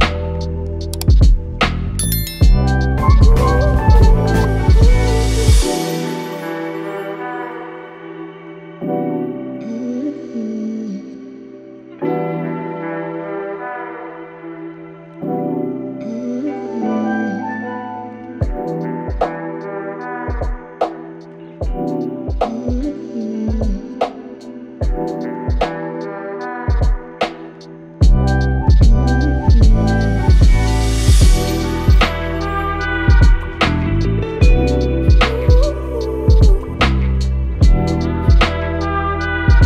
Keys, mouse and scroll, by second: 7.1-9.9 alt+click, 7.3 alt+click, 11.1-11.9 typing, 11.4-20.1 drag, 19.9-20.6 typing, 23.0-24.3 typing, 23.8 click, 25.8-26.5 typing, 26.2 click, 27.8-28.5 typing, 28.0-31.7 drag, 35.3-36.0 typing, 35.5-39.3 drag.